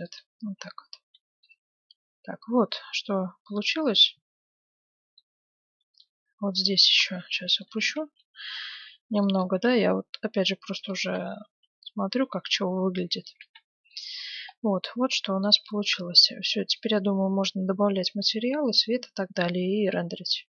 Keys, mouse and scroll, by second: 0.3 Tab, 0.9 z, 1.4-3.4 middle drag, 5.7 a, 6.3 a, 6.9-8.5 right drag, 7.1 Tab, 7.6-9.5 middle drag, 8.1 z, 8.7 a, 9.0 b, 9.6 g, 11.0 Tab, 11.4 z, 11.9-12.2 scroll down 1, 12.2-18.3 middle drag, 13.4 a.